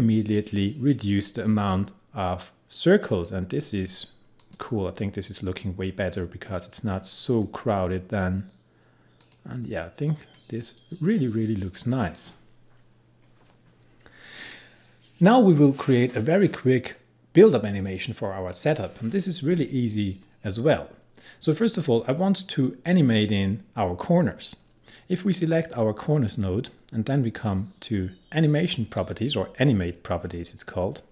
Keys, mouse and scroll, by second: 4.4 click, 7.4 click, 12.1 click, 22.9 click, 29.0 click.